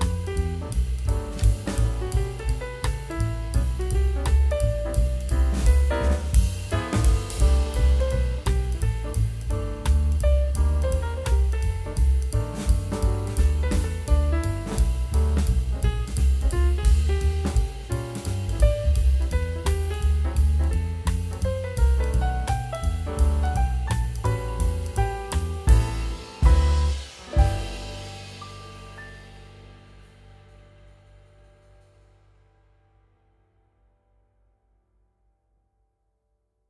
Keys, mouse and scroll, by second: 9.4 double click, 14.6 a, 15.2 Tab, 16.9 Tab, 17.5 ctrl+0.